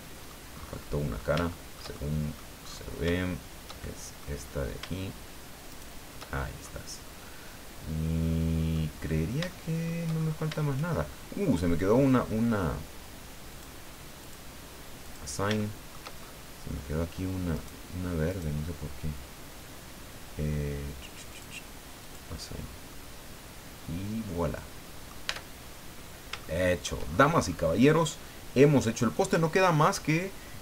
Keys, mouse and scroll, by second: 0.5-1.0 scroll up 1, 1.1 scroll up 3, 1.5-2.6 shift+middle drag, 3.8 shift+middle click, 5.7 shift+right click, 6.3-6.8 shift+scroll down 3, 7.0-8.9 middle drag, 8.9 scroll down 2, 9.5 shift+middle click, 10.2 shift+scroll up 2, 13.5 click, 14.2 click, 15.0 click, 15.6 shift+middle click, 16.2 shift+scroll up 2, 17.6 right click, 18.3 right click, 21.3 click, 22.0 click, 22.6 scroll down 2, 22.9-25.2 middle drag, 25.2 Tab, 25.5-26.3 scroll down 5, 26.4 shift+middle click, 27.5 scroll down 2.